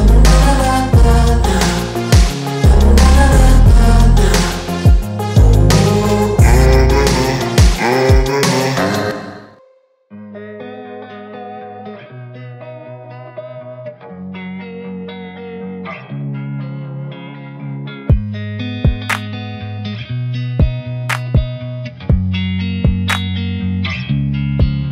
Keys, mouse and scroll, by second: 0.5 click, 1.6 click, 2.2-2.6 scroll up 2, 2.6 g, 5.6-7.1 drag, 7.2-7.7 scroll down 1, 7.7-9.3 drag, 12.9-13.2 shift+middle drag, 13.2-14.7 scroll up 1, 15.1-16.7 shift+drag, 16.9 g, 17.9-19.1 scroll down 6, 19.1 shift+click, 19.8 g, 20.6-21.1 scroll down 1, 22.2 click, 22.4 scroll down 3, 22.7-23.1 shift+middle drag, 23.1-23.7 scroll up 1, 23.7-24.1 scroll down 3, 24.1 shift+middle drag, 24.5-24.9 shift+middle drag.